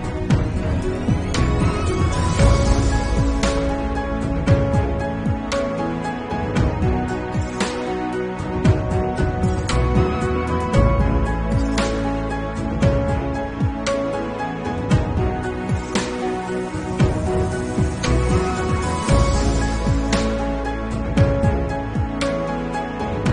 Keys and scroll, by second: 0.4 ], 3.4-5.5 typing, 4.4 Return, 6.1 ctrl+z, 8.3 ctrl+alt+z, 10.1 ctrl+alt+z, 11.8 ctrl+alt+z, 12.6 ctrl+alt+z, 16.3 ctrl+alt+z, 18.6 ctrl+alt+z, 20.5 ctrl+alt+z, 21.3 ctrl+s, 23.1 [.